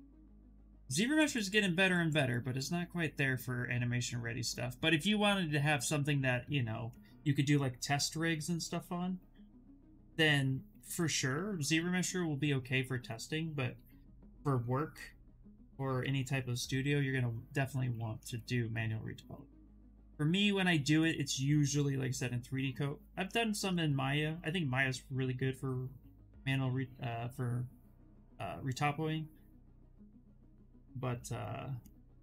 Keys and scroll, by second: 10.8 ctrl+z, 11.0 ctrl+z, 11.5 s, 20.0 s, 26.7 s.